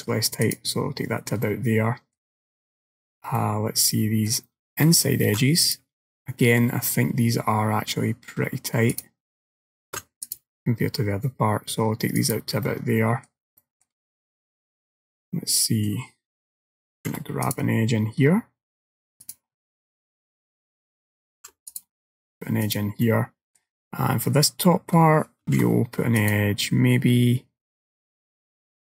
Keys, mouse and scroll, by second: 1.5 middle click, 3.4 middle click, 5.3 ctrl+r, 6.4 middle click, 9.9 ctrl+r, 12.7 middle click, 13.7 shift+middle click, 14.2 middle click, 17.0 ctrl+r, 20.0 shift+middle click, 21.4 ctrl+r, 23.1 middle click, 24.3 scroll up 1, 25.5 ctrl+r.